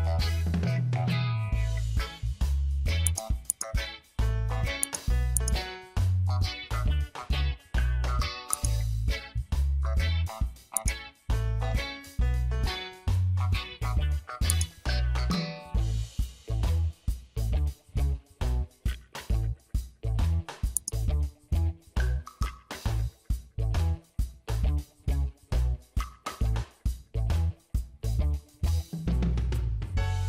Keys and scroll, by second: 1.0 Return, 18.9 ctrl+t, 28.0 shift+Return.